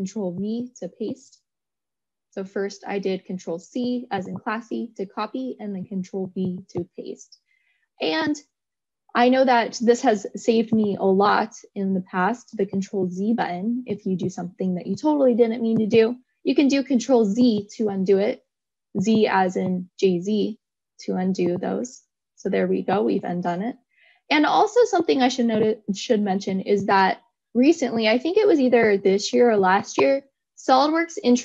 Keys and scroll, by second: 3.9 ctrl+c, 6.3 ctrl+v, 13.2 ctrl+z.